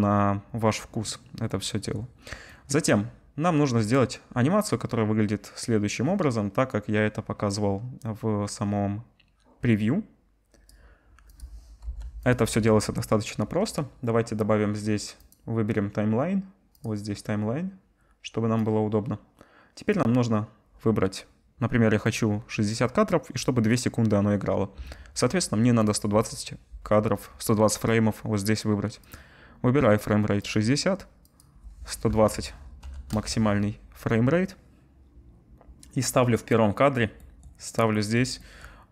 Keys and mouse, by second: 6.1-12.3 middle drag, 12.3-13.7 right drag, 13.7 click, 15.0 click, 22.1-25.9 drag.